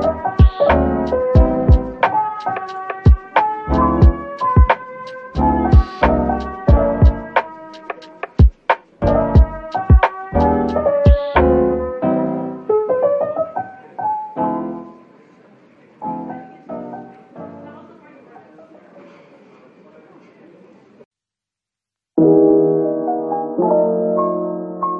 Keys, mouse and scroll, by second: 1.5 ctrl+a, 2.8 shift+a, 5.0 scroll down 1, 5.3-6.2 typing, 7.7 typing, 9.0-9.3 scroll up 1, 9.3 middle click, 10.2-12.2 typing, 13.2 middle click, 14.3-14.6 typing, 17.4 middle click, 18.9-21.1 typing, 21.4 middle click, 24.1 Tab, 24.5 Tab.